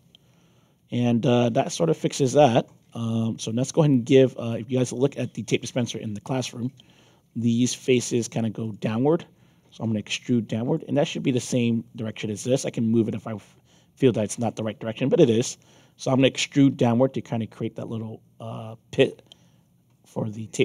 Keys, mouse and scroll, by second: 3.7 middle click, 5.8-8.1 right drag, 8.6 click, 9.6-10.7 alt+drag, 17.6-20.6 shift+drag.